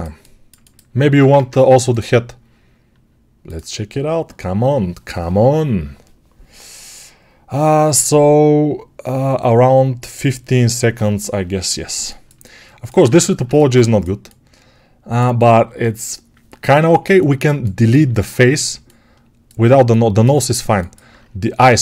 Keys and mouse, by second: 1.2 ctrl+Tab, 5.6-16.7 right drag, 12.9 Tab, 16.7-19.6 ctrl+alt+drag, 20.5-21.8 ctrl+alt+drag.